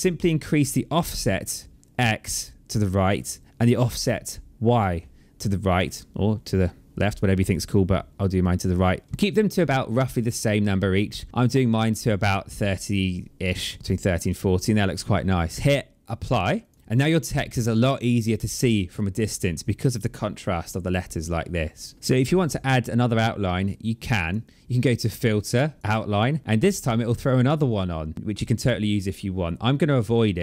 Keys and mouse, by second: 2.9 click, 16.4 click, 23.7 click, 25.7 click, 27.7 click.